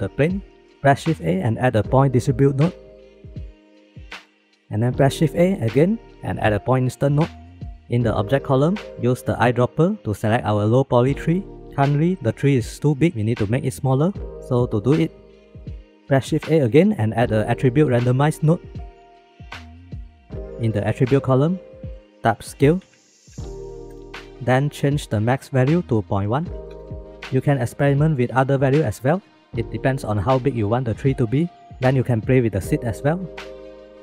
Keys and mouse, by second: 1.1 shift+a, 5.4 shift+a, 9.1 click, 9.7 click, 14.8 click, 15.7 click, 16.3 shift+a, 19.4 click, 21.7-24.2 drag, 24.2 ctrl+z, 25.7-26.7 middle drag, 31.8 shift+click, 33.0 click.